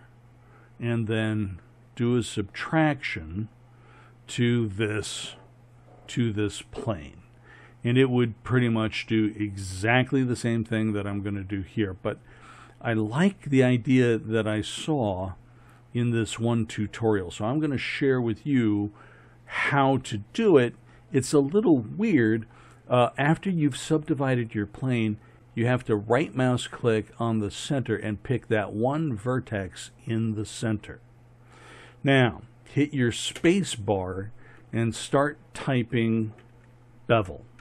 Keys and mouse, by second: 33.4 space.